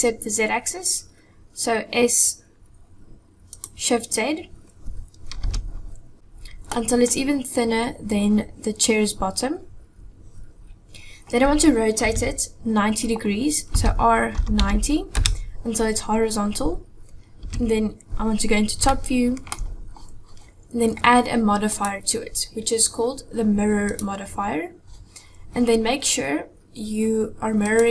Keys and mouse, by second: 5.5 KP_7, 6.2-6.6 drag, 12.0 KP_1, 13.8 r, 17.5 KP_7, 18.9-19.6 shift+drag, 21.8-24.0 drag, 27.7 click.